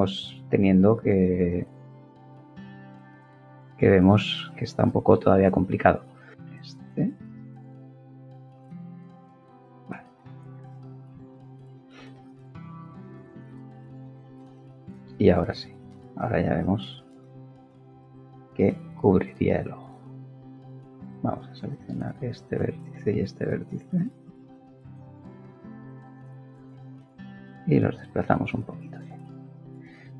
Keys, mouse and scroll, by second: 1.4-3.0 middle drag, 6.4 middle click, 11.1 ctrl+KP_3, 12.7 KP_3, 18.5 click, 20.0-21.5 right drag, 21.5 click, 24.1 g, 26.5 y, 28.0 click, 28.6-30.1 middle drag.